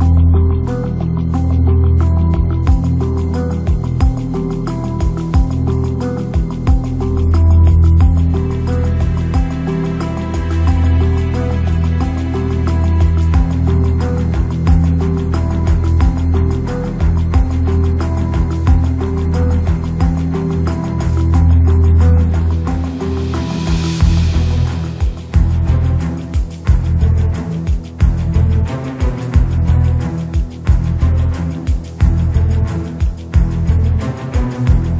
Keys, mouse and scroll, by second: 0.0 click, 1.2 KP_0, 1.7 shift+middle click, 1.8 shift+click, 2.5 click, 3.2 ctrl+4, 3.9 middle click, 5.1 KP_0, 7.0 shift+a, 9.3 s, 10.3 s, 12.3 g, 13.6 s, 14.4 s, 16.3 s, 18.9 click, 19.9 click, 20.9 click, 22.4 click, 24.3 click, 25.3-26.4 drag, 28.8 click, 31.8 click, 32.7 g.